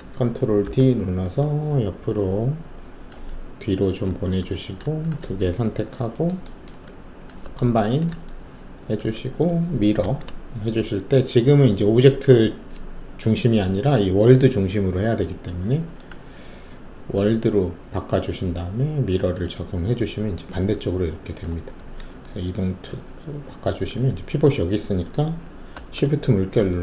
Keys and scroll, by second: 0.6 ctrl+d, 7.8 alt+shift+a, 10.0 ctrl+alt+e, 21.7 alt+w, 25.7 shift+`.